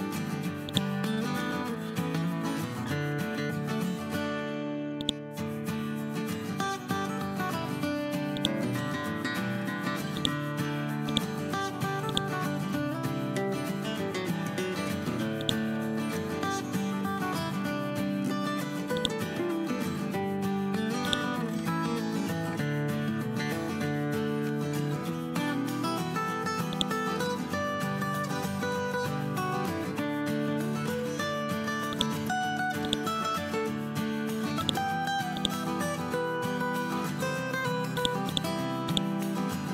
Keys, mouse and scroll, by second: 0.6 right click, 4.9-6.2 drag, 9.4 e, 10.1 click, 14.5 l, 16.9 scroll up 1, 17.5 scroll down 1, 18.9 click, 19.4 scroll up 1, 21.0-22.8 drag, 23.6 scroll up 1, 24.3-24.7 scroll down 2, 25.5 scroll up 1, 26.6-29.4 drag, 29.9 scroll down 1, 30.7 scroll up 1, 31.8 shift+click, 32.4 e, 32.8 click, 36.6 ctrl+z, 37.9 click, 39.4 scroll up 1.